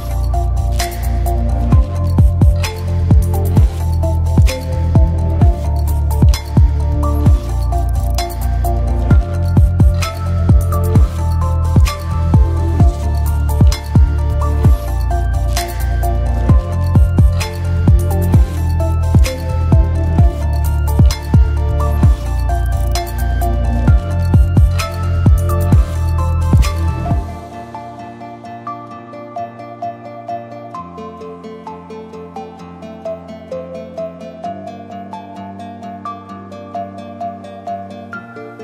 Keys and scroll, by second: 3.4 e, 3.5 ctrl+d, 14.0 ctrl+d, 26.6 0, 26.8 Return, 29.0-29.9 typing, 32.3-33.3 typing, 35.7 0, 36.0 Return.